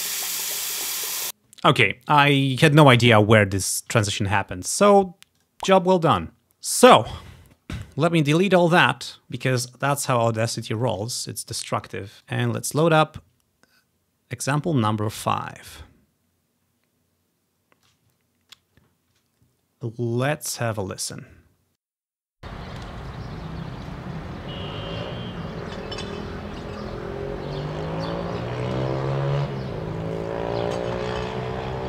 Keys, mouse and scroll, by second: 1.3 space, 4.2-5.5 ctrl+scroll down 1, 4.9 ctrl+z, 5.5-6.9 drag, 6.8-8.0 scroll up 2, 10.7 click, 11.3 click, 12.4 click, 14.6 click, 15.2-18.0 drag, 18.4-19.6 scroll down 3, 19.6-20.1 scroll down 1, 20.9-22.7 drag, 22.3 space.